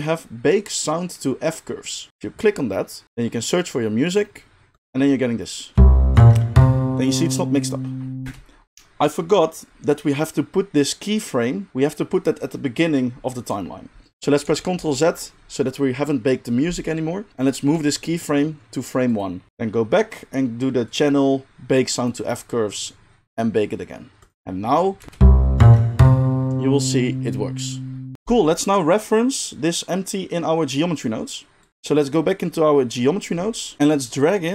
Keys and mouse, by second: 4.8 middle click, 5.7-19.2 drag, 5.7 space, 8.2 space, 14.4 ctrl+z, 14.8 ctrl+z, 17.7 g, 19.2 middle click, 19.5-22.2 drag, 19.5 g, 24.3 click, 24.7 middle click, 25.0 space, 25.7-28.1 middle drag, 28.1-31.7 drag, 28.1 space, 31.7-34.5 middle drag.